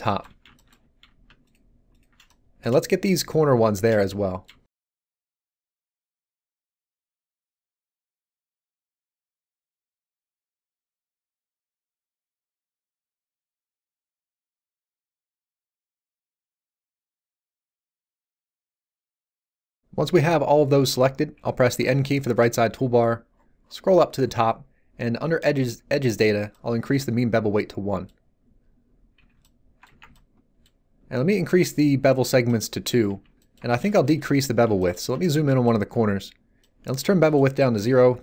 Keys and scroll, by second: 21.8 n, 29.2 z, 29.9 Tab, 33.1 z.